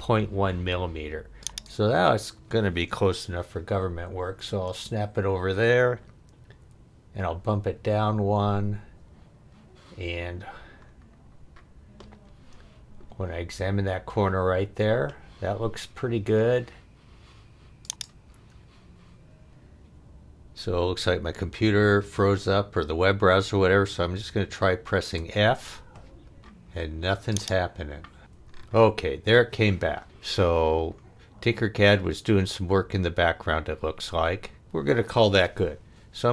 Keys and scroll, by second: 4.0 Left, 6.6 Down, 25.2 f.